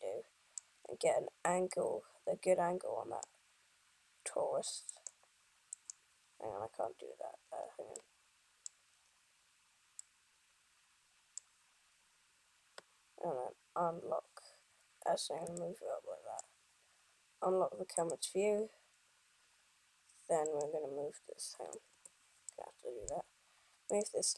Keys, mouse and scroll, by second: 1.1-2.0 scroll up 3, 1.9 middle click, 3.6-4.2 scroll down 1, 5.0 right click, 7.8 scroll up 2, 8.0 scroll down 1, 8.2 middle click, 9.1 scroll up 1, 10.2 middle click, 15.7 shift+middle click, 18.1 click, 20.7 right click, 22.0 KP_1, 22.8 middle click, 24.2 right click.